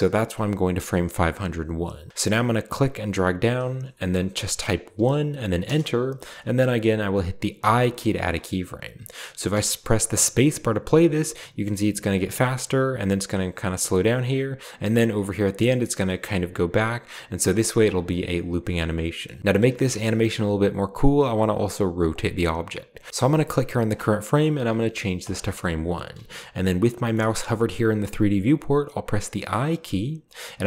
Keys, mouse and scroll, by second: 2.7 click, 4.9 1, 5.6 Return, 7.5 i, 9.4 space, 12.2 drag, 13.9 click, 15.4-15.7 drag, 17.1 click, 18.0-19.2 middle drag, 19.4 middle click, 22.0 middle click, 24.6 1, 25.2 click, 27.1 middle click, 29.2 i.